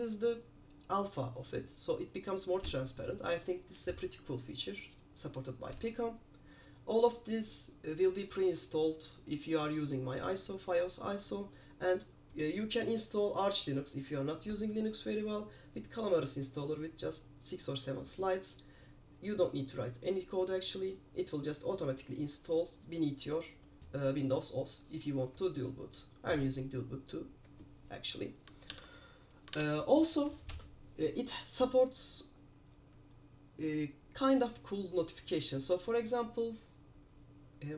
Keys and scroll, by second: 28.9 super+q.